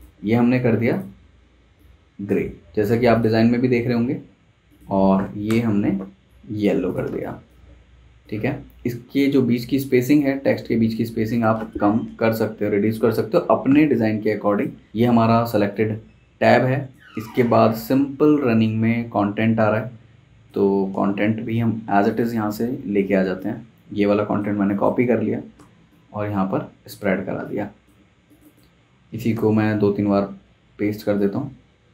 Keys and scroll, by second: 5.5 i, 7.1 space, 12.0 shift+Page_Down, 12.9 Page_Up, 13.1 Page_Up, 14.9 super+z, 21.1 super+z, 24.5 z, 25.5 v, 29.1 super+c, 29.3 super+v, 30.5 Escape.